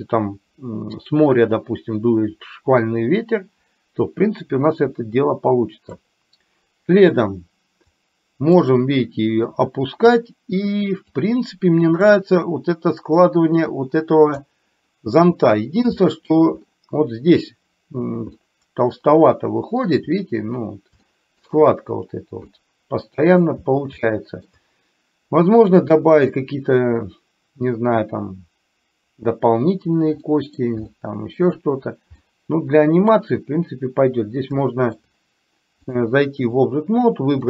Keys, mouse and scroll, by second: 8.1 click, 9.5 click, 11.4 click, 13.3-14.4 drag, 16.1 scroll up 1, 18.5-19.4 scroll up 1, 19.4 middle click, 21.1 shift+middle click, 22.6 middle click, 23.3 middle click, 24.1 shift+middle click, 30.4 middle click, 31.0 shift+middle click, 32.3-33.3 middle drag, 34.6 shift+middle click, 35.9 click.